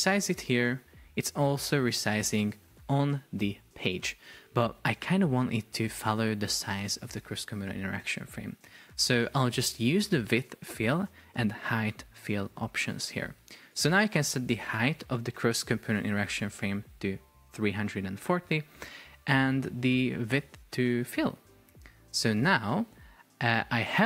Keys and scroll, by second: 15.3 Delete, 18.2 Return.